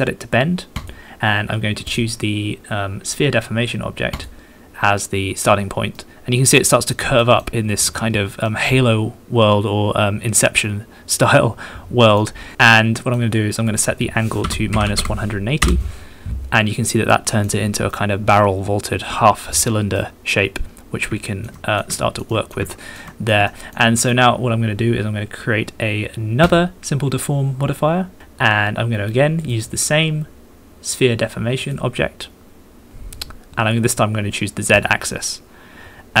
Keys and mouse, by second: 1.2 middle click, 6.0 middle click, 7.2 shift+middle drag, 8.5 middle click, 10.2 middle click, 10.6 middle click, 13.0 click, 13.0 middle click, 13.0 right click, 13.7-16.2 right drag, 16.9 click, 16.9 middle click, 16.9 right click, 17.9 middle click, 18.8 middle click, 20.0-21.1 middle drag, 21.3 shift+click, 21.6 middle click, 22.0 shift+middle click, 22.3 shift+middle click, 22.7 shift+middle click, 23.1 middle click, 23.5 shift+middle click, 23.8 middle click, 26.4-28.2 drag, 35.3-36.2 drag.